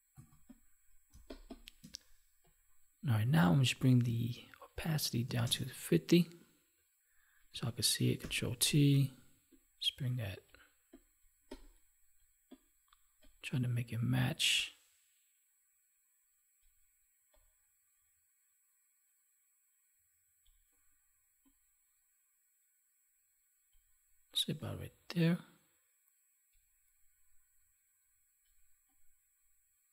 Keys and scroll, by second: 1.0 space, 8.1 ctrl+t.